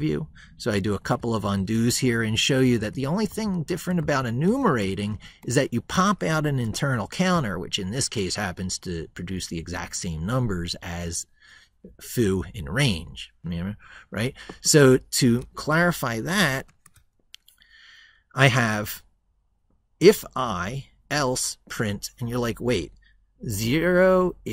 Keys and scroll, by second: 0.5 ctrl+z.